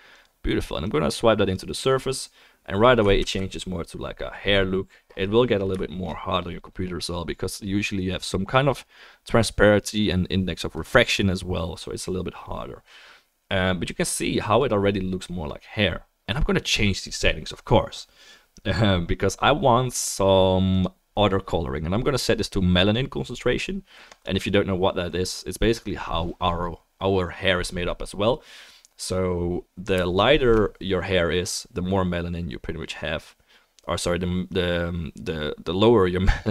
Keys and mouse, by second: 1.0-2.3 drag, 1.0-2.3 middle drag, 3.3 ctrl+s, 3.9-7.5 drag, 3.9-6.5 middle drag, 3.9-6.5 right drag, 14.3-20.4 middle drag, 24.9-35.1 drag, 24.9-33.9 middle drag, 24.9-33.9 right drag, 35.7 click.